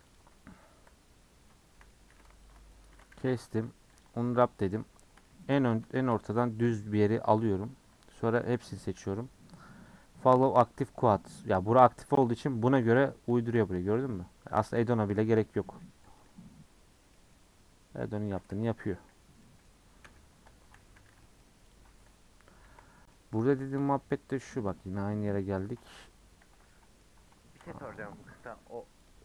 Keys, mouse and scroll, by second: 0.1 click, 0.7 KP_Decimal, 1.2-1.7 scroll down 5, 1.7 middle click, 2.1 2, 2.5 alt+click, 2.9 a, 4.1 u, 4.6 3, 7.3 click, 8.4 l, 13.3 click, 15.8 n, 16.1 click, 19.1 scroll down 7, 19.4 middle click, 20.0 /, 20.5 Tab, 20.8 h, 21.2-21.7 middle drag, 21.7 click, 22.6 KP_Decimal, 23.1-23.5 middle drag, 23.5-23.8 scroll up 4, 23.8-27.9 shift+middle drag, 27.9 click, 28.5 click, 29.1 click.